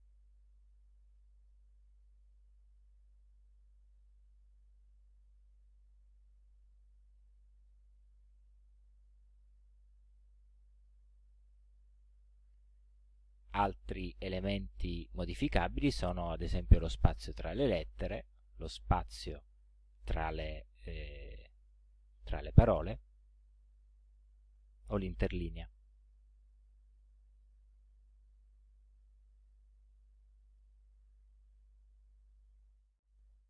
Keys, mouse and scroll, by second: 9.1-11.1 drag, 18.1-23.2 drag, 25.2-26.4 drag, 27.7 ctrl+scroll down 2, 29.0-30.8 drag, 32.3 click.